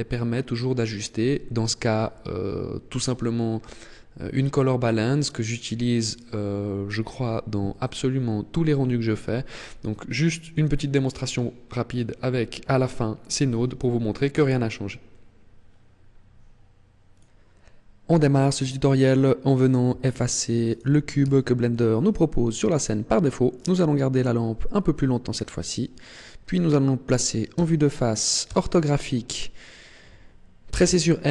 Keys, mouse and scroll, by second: 20.7 right click, 21.3 x, 23.6 right click, 27.5 KP_1, 28.5 KP_5, 30.7 n.